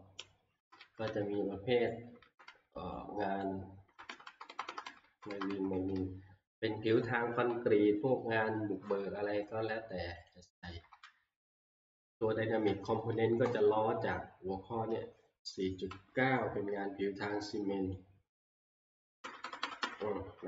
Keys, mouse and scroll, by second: 0.6 Left, 0.8 Left, 1.0 Left, 1.9 click, 2.1 Left, 2.3 Left, 2.5 Left, 3.9 Left, 4.1 Left, 4.3 Left, 4.5 Left, 4.7 Left, 4.8 Left, 5.0 Left, 5.3 Left, 5.5 Left, 5.7 Left, 6.0 Left, 7.3 Right, 8.6 Left, 8.9 Left, 9.2 Left, 10.3 click, 10.6 Left, 10.9 Left, 11.1 Left, 16.9 Left, 17.3 Left, 18.6 click, 19.6 Up.